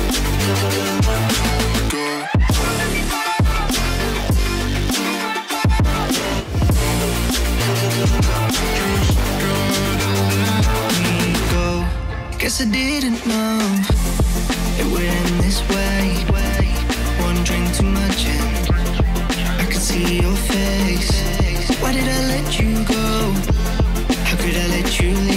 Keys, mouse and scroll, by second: 0.3 scroll down 4, 0.4 click, 0.9 click, 1.0 click, 1.2 scroll up 3, 1.4 scroll down 2, 1.7 click, 2.0 click, 2.1 middle click, 2.5 click, 2.6-2.9 middle drag, 2.9 scroll down 1, 3.0 middle drag, 3.1 scroll up 1, 3.2 middle drag, 3.4 scroll down 7, 3.5 middle click, 3.6 scroll up 1, 3.7 middle click, 4.7 scroll up 5, 4.8-6.3 middle drag, 6.7 middle click, 7.1 scroll up 1, 7.2-8.0 scroll down 2, 8.7 click, 8.9 scroll down 3, 8.9-9.7 scroll up 2, 10.2-11.4 drag, 13.0 click, 14.2 click, 14.9 shift+click, 15.1 Delete, 15.4 Delete, 15.6 click, 15.6-17.6 right drag, 18.0 click, 18.2 scroll down 3, 18.3 scroll up 4, 19.3 scroll down 6, 19.4 scroll up 5, 19.6 middle click, 19.7 scroll down 2, 19.8 middle click, 20.0 middle click, 20.1 scroll up 7, 20.2 middle click, 21.5-22.2 scroll up 2.